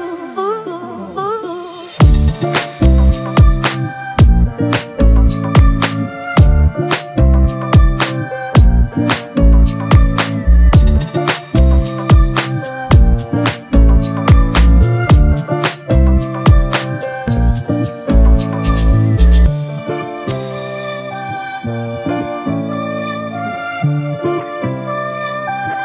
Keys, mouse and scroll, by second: 4.8 Return.